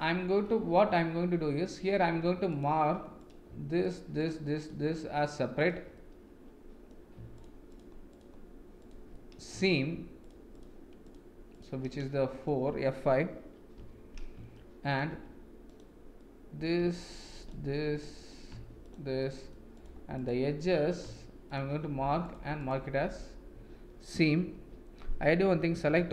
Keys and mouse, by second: 0.4-2.0 middle drag, 2.5 alt+click, 4.1 shift+click, 5.2 shift+click, 5.9 middle click, 7.3 shift+click, 8.1 shift+click, 9.1 middle click, 10.2 shift+click, 10.5 shift+click, 11.0 shift+click, 11.9 middle click, 13.7 F5, 14.5 shift+middle click, 15.6 click, 16.1 middle click, 17.3 shift+click, 17.9 middle click, 19.2 shift+middle click, 19.7 shift+click, 20.1 shift+click, 20.6 middle click, 22.2 shift+click, 24.5 F5, 25.8 a.